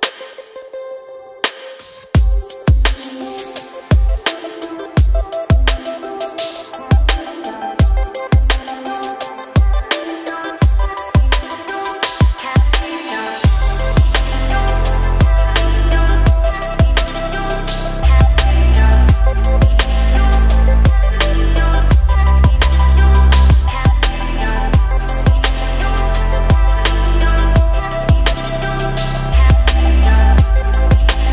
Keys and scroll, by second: 19.4 KP_0, 20.0 Delete, 20.3 2, 20.7 Return, 22.4 Tab.